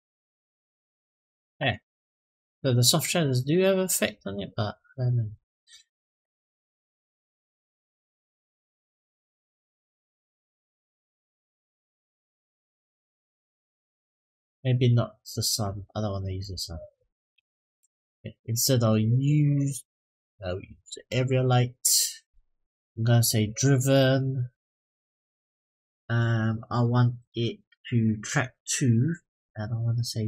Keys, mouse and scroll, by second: 0.1 click, 0.5 click, 1.0 click, 1.4 click, 6.8-8.3 drag, 9.7-12.8 drag, 15.4-16.0 scroll down 2, 16.2 click, 17.1 Delete, 18.5-20.9 drag, 23.1 click, 24.0-28.3 drag, 29.9 click.